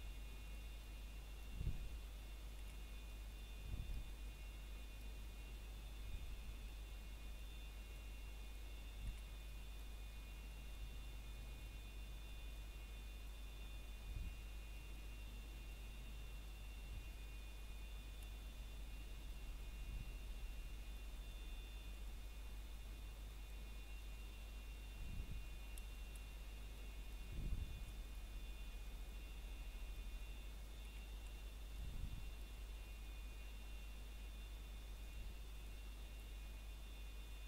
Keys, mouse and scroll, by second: 0.0 middle click, 0.4 scroll up 1, 0.9 middle click, 1.7 scroll up 1, 2.1 middle click, 2.5-2.8 scroll up 1, 2.8 middle click, 3.3 shift+middle click, 3.6 scroll up 1, 4.7 middle click, 7.2 middle click, 10.2 a, 10.8 ctrl+right click, 13.0 click, 14.3 scroll down 1, 14.6 middle click, 15.4 scroll up 1, 15.4 typing, 16.0 middle click, 17.3 a, 18.1 ctrl+right click, 19.4 click, 21.7 a, 22.5 scroll down 1, 22.9 middle click, 24.8-25.4 scroll up 1, 25.4 middle click, 25.9 scroll down 1, 26.4 middle click, 26.7 scroll up 1, 27.0 shift+middle click, 27.3 scroll up 1, 27.7 middle click, 29.1-30.1 scroll up 1, 30.2 ctrl+right click, 31.5 click, 33.4 a, 34.0 ctrl+right click, 37.1 click.